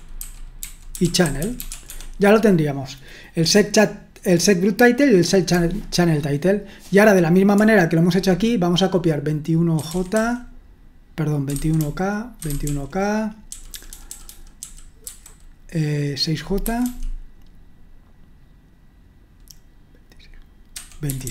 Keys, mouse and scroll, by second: 0.0-3.6 typing, 1.9 Escape, 5.5-8.4 typing, 9.5-15.0 typing, 16.6 typing, 20.8-21.3 typing.